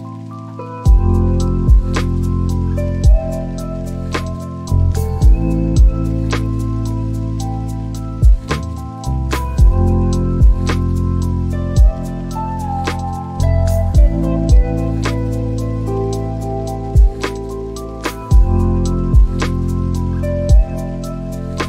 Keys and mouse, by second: 2.6 shift+click, 4.6 f, 6.0 click, 7.2 f, 7.7-8.3 f, 11.5 middle click, 14.4 click, 16.4 click, 20.0 ctrl+a, 21.5 click.